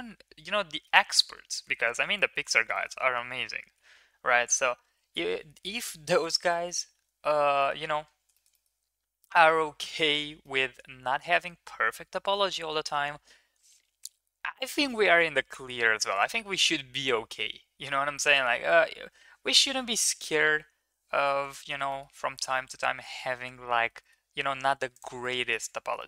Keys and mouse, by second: 0.9 Tab, 1.4 middle click, 1.7 ctrl+s, 2.1 middle click, 2.5 shift+middle click, 2.7 middle click, 3.7 KP_0, 4.2 KP_1, 5.5 ctrl+s, 6.2-6.7 shift+middle drag, 6.9 ctrl+s, 7.2-7.7 middle drag, 8.3 middle click, 8.5 middle click, 10.4 middle click, 21.4 shift+middle drag, 21.8 middle click, 22.5 shift+middle click, 23.2 shift+middle drag, 23.8 middle click, 24.9 click, 25.2 middle click, 25.4 Tab, 25.9 middle click.